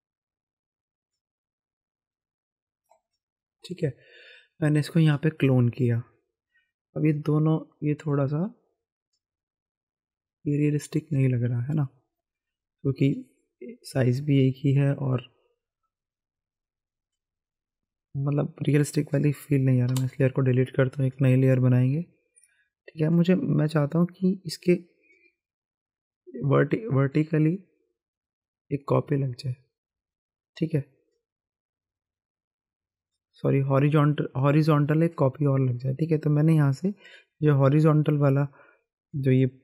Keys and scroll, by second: 19.9 Delete.